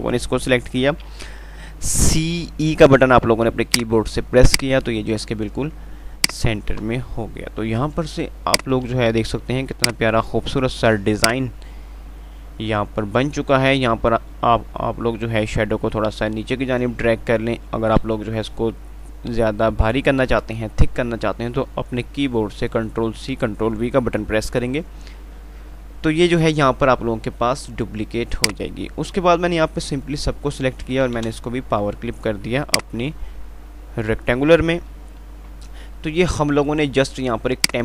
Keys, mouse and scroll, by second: 1.5-2.1 typing, 4.0 click, 4.3 F2, 4.5 click, 4.8 F2, 6.5 click, 6.7 F2, 8.8-13.6 drag, 9.4 typing, 13.6 ctrl+r, 28.1 alt+Num_Lock, 28.7-31.3 alt+drag, 31.3 alt+w, 33.0 click, 35.5 F3.